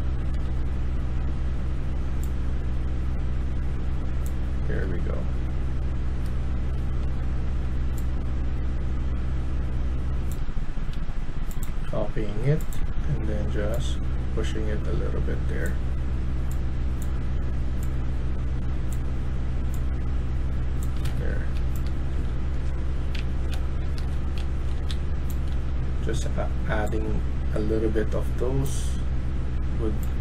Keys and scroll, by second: 0.3 Tab, 1.2 Tab, 4.6 Tab, 6.9 Tab, 21.0 Escape, 21.5-25.4 typing.